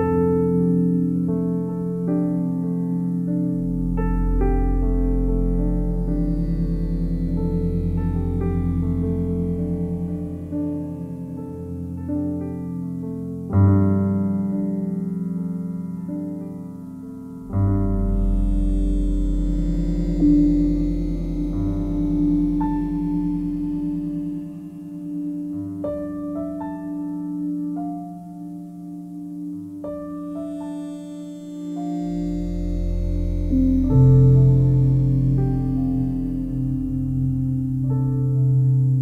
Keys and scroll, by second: 18.8 i.